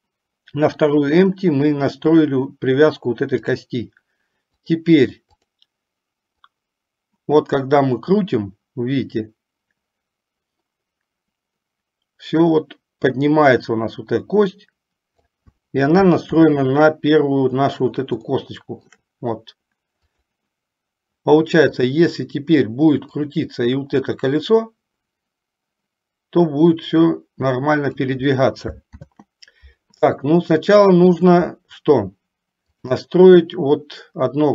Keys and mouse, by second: 3.6 click, 4.7 click, 5.6 click, 6.7-15.5 drag, 16.6 ctrl+z, 18.6-19.2 shift+middle drag, 20.2-20.6 drag, 22.0 click, 24.6-28.3 drag, 29.2 ctrl+z, 31.0 shift+middle click, 32.8 click.